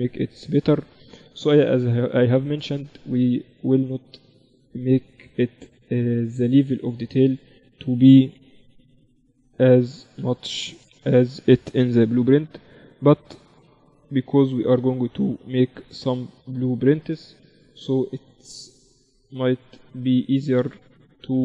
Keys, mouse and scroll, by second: 1.3 KP_1, 2.5-4.5 drag, 2.9 shift+a, 8.5 s, 11.1 shift+Tab, 11.9 s, 13.8 r, 16.1-17.9 drag, 17.6 KP_7, 18.6-20.9 drag, 20.9-21.4 middle drag, 20.9 s.